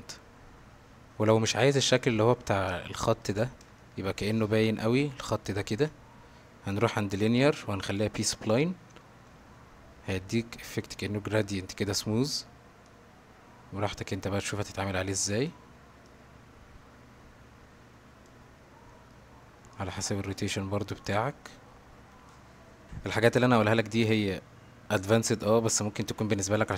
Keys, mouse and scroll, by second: 1.1 ctrl+z, 2.9-3.3 shift+middle drag, 3.8-4.3 shift+middle drag, 7.4-8.4 drag, 12.9-14.0 drag, 14.7-15.5 drag, 16.1-18.3 drag, 19.1 middle click, 19.8-22.4 drag, 23.8-24.4 middle drag.